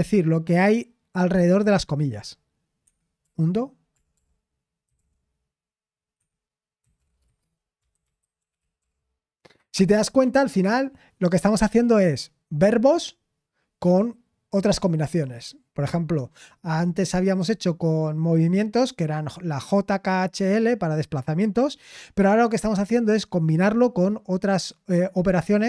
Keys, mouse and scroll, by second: 3.2-5.4 typing, 6.2 Escape, 6.5-9.3 typing, 9.5 Escape.